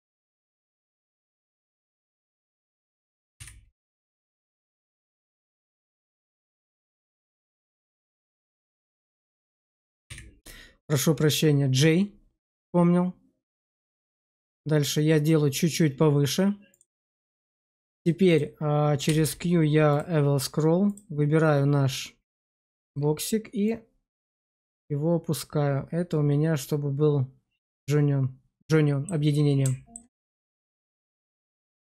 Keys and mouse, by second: 3.3 u, 10.0 j, 16.6 click, 17.1 shift+middle drag, 17.5 middle click, 18.2 click, 18.9 q, 21.8 middle click, 22.6 shift+middle click, 23.7 middle click, 29.2 middle click, 30.2 shift+middle click, 31.3-31.9 middle drag.